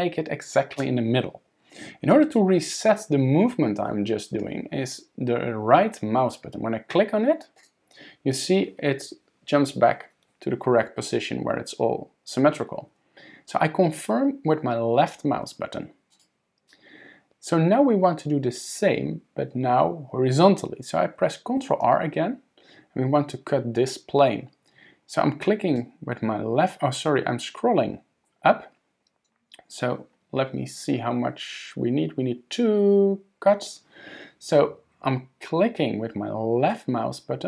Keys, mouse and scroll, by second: 16.1 click, 21.6 ctrl+r.